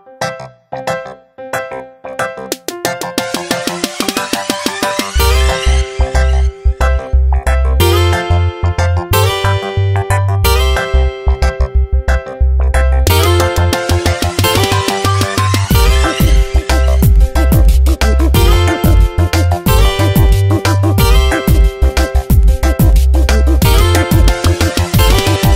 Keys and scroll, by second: 8.8 Tab, 9.1 space, 11.7 ctrl+z, 21.2 ctrl+Return, 21.8 s, 24.9 ctrl+shift+n, 25.2 Return.